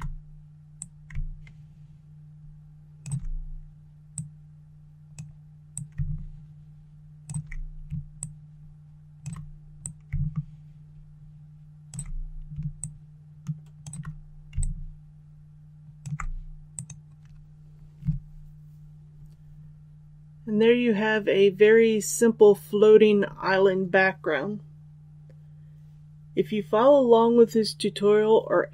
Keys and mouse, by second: 0.7-2.9 drag, 4.1-7.2 drag, 8.1 shift+click, 9.7-11.8 drag, 12.7 shift+click, 14.5-15.9 alt+drag, 16.6 click.